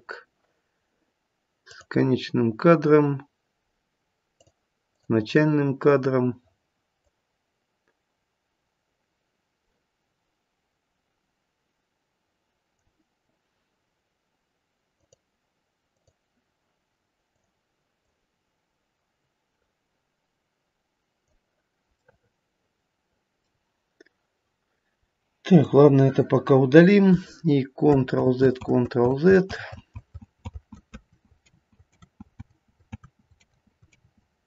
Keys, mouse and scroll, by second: 1.7 click, 4.3 click, 4.9 click, 6.9 click, 15.0 click, 15.9 click, 17.3 click, 18.0 click, 21.9 middle click, 25.5 click, 28.1 ctrl+z, 28.6 ctrl+z, 29.1 ctrl+z, 29.5 ctrl+z, 29.9 ctrl+z, 30.9 ctrl+z, 31.4 ctrl+z, 32.0 ctrl+z, 32.4 ctrl+z, 32.9 ctrl+z, 33.4 ctrl+z, 33.9 ctrl+z.